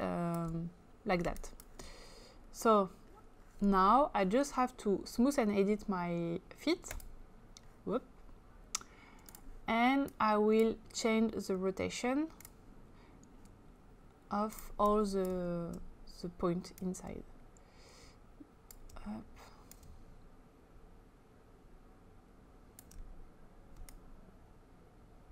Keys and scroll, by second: 1.2 space.